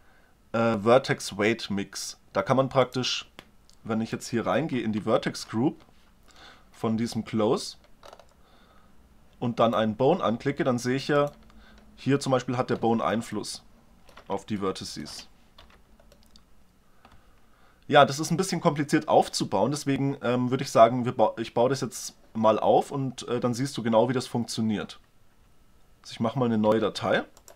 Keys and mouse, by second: 4.2 right click, 5.0 ctrl+Tab, 5.6 right click, 8.1 middle click, 9.6-12.9 right drag, 13.3-14.6 middle drag, 14.7 middle click, 15.6 z, 26.5 ctrl+n.